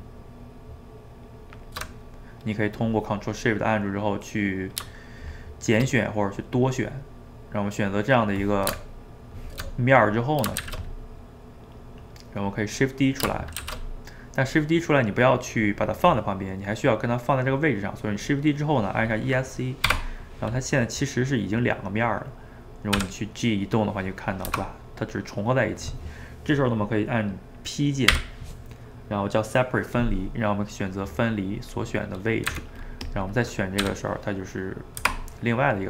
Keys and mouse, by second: 1.9-5.0 middle drag, 5.2 shift+click, 6.1-9.0 middle drag, 9.8 middle click, 10.6 shift+z, 11.2-13.6 middle drag, 13.6 shift+d, 20.6-23.0 middle drag, 23.0 g, 28.1 p, 32.1 middle click, 32.5 Tab, 32.9 click, 33.1 click, 33.8 g, 35.4-35.8 middle drag.